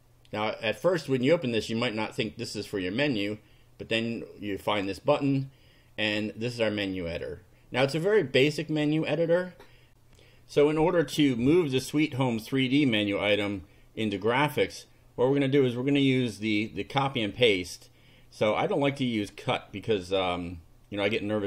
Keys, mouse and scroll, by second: 0.8 click, 4.5 click, 7.2 click, 9.9 ctrl+r, 18.4 click, 21.1 click.